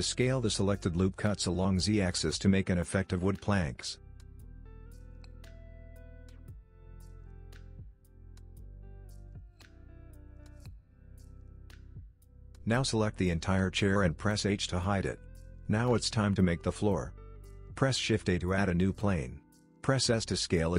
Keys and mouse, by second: 2.0 middle click, 3.2 Tab, 3.5 middle click, 5.1 click, 5.7 middle click, 7.2-8.3 drag, 12.4 middle click, 13.1 click, 14.2 h, 14.9 click, 16.3 h, 17.3 shift+a, 18.7 middle click, 19.2 s.